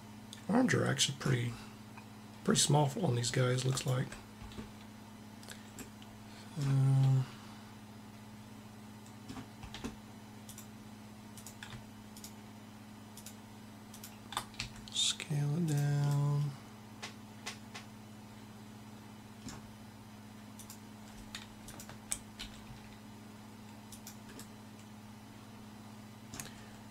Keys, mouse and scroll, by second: 3.4 click, 10.2-14.9 drag, 14.3 s, 20.3-21.5 drag, 22.2 s, 22.4 s.